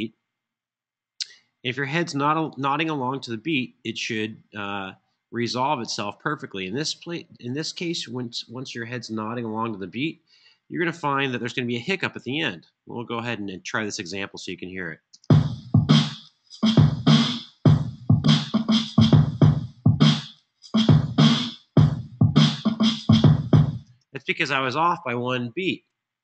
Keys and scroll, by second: 14.8 typing, 23.6 space.